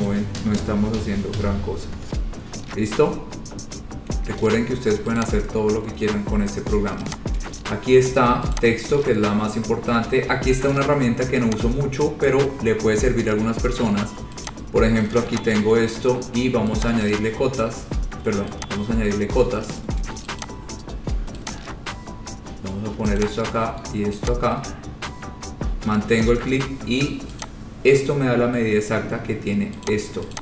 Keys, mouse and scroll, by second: 0.2 click, 0.9 Delete, 1.8-4.6 scroll, 5.4 click, 8.2 click, 8.8 click, 12.5 click, 14.7 click, 15.7 ctrl+click, 17.8 click, 19.6 click, 19.8 scroll down 2, 20.5 scroll, 20.6 click, 21.7 click, 23.4 click, 26.4 click, 27.6 click, 28.8-29.2 scroll, 30.1 click.